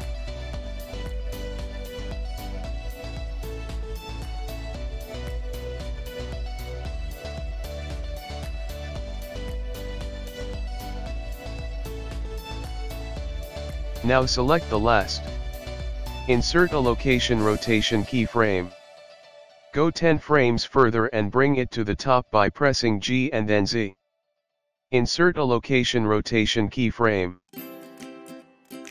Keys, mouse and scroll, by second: 2.1 click, 5.3 click, 8.5 i, 13.6 click, 15.1 i, 19.0 click, 21.3 g.